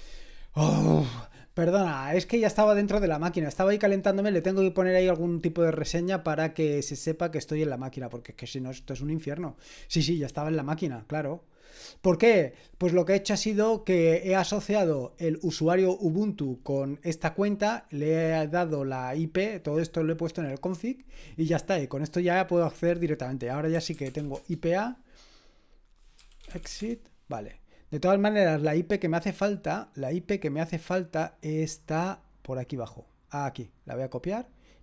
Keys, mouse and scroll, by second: 23.7-24.7 typing, 26.0-27.2 typing, 30.9-31.6 scroll down 1, 31.9-33.8 scroll down 1, 34.1 click.